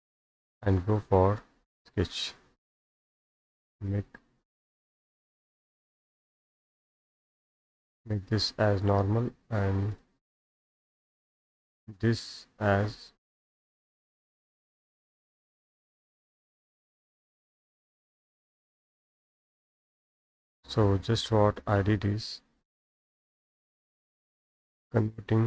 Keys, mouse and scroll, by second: 1.9 right click, 5.0 click, 6.7 right click, 8.1 click, 8.9 click, 9.2-9.5 scroll down 2, 10.0 click, 11.2 click, 14.6 right click, 16.0 click, 18.6 right click, 20.1 click, 22.9-24.8 drag, 25.0 right click.